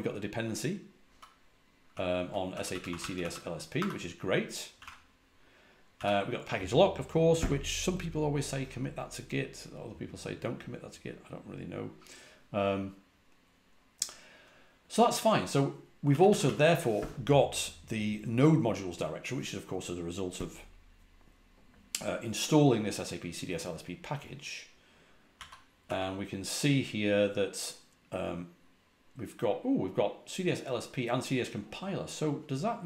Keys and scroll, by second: 1.0-5.8 typing, 16.0-16.3 typing, 25.3-25.7 typing, 32.7-32.8 typing.